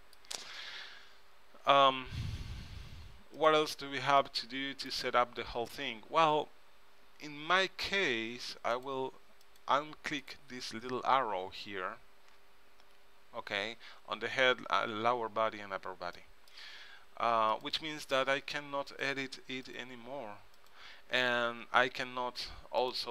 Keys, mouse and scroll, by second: 0.0-1.7 middle drag, 3.5-5.4 drag, 4.3 middle click, 4.3 right click, 8.9-12.2 drag, 16.3-17.7 middle drag, 17.7-22.6 drag, 22.1 r.